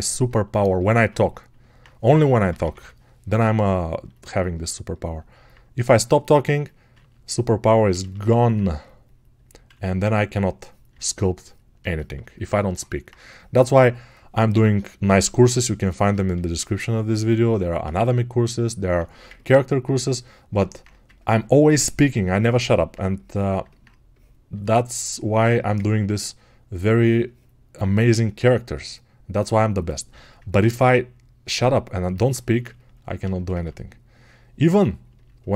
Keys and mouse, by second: 20.5-25.9 alt+drag.